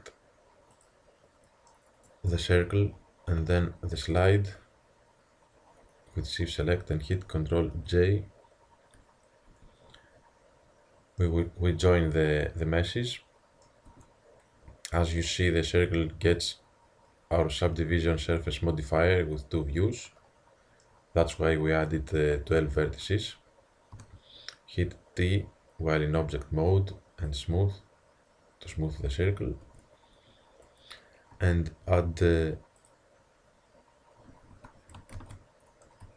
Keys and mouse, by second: 0.8-2.6 drag, 4.2 click, 7.8 ctrl+j, 9.5 Tab, 13.1 middle drag, 13.9 Tab, 20.0-22.6 middle drag, 24.0 t, 24.6-25.8 drag, 27.3-29.1 drag, 28.8 t, 29.7 Tab, 31.7 ctrl+r, 35.2 ctrl+z.